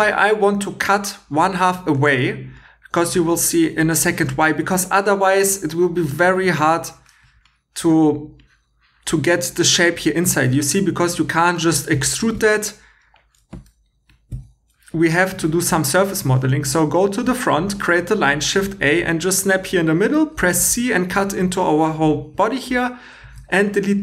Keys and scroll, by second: 4.4 2, 12.4 Escape, 13.4 e, 14.3 Escape, 20.5 c, 23.2 Tab.